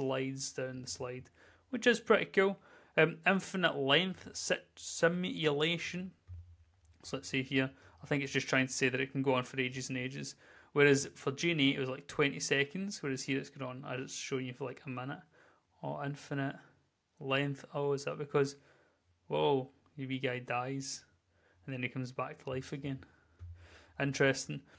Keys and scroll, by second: 6.2 w, 7.6-9.7 typing, 11.1-12.9 typing, 14.2 w, 14.4 w, 15.2 w, 18.5 w.